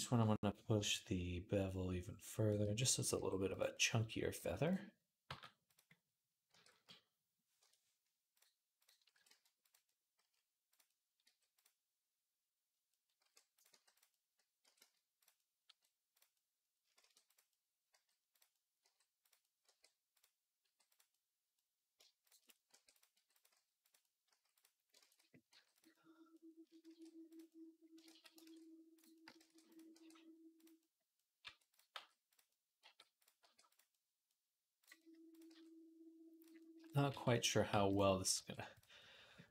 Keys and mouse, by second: 2.6 click, 2.9 g, 3.4-5.7 middle drag, 4.2 g, 5.1 g, 5.9-8.1 middle drag, 6.3 r, 8.1-9.5 drag, 8.9 r, 9.5 middle click, 10.0 s, 11.0 g, 12.9 middle click, 13.1 r, 13.5-16.1 drag, 13.5 g, 14.4 r, 15.5 g, 16.8-20.4 typing, 21.1-24.7 middle drag, 22.6 r, 23.0 g, 23.3 s, 24.1 s, 24.8 ctrl+z, 24.9 middle click, 25.3 g, 25.8 click, 26.7 shift+d, 27.3 click, 27.3 middle click, 27.4 click, 27.7 middle click, 27.8 ctrl+click, 27.9 ctrl+z, 28.0 right click, 28.3 ctrl+z, 28.3 right click, 29.1 right click, 29.2 shift+d, 29.3 right click, 29.7-34.6 middle drag, 29.7 r, 31.2 r, 31.7 g, 32.6 g, 33.2 r, 34.6 click, 34.7 middle click, 35.1 click, 35.2 middle click, 35.3 g, 36.9 r, 37.5 g, 38.0-39.5 drag, 38.2 r, 39.4 r.